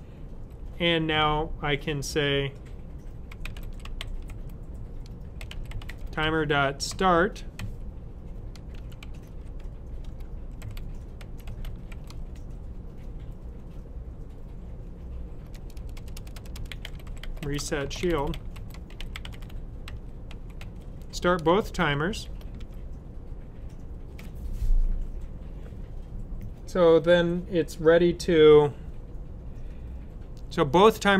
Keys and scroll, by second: 3.0-7.5 typing, 8.7-12.4 typing, 15.5-22.5 typing.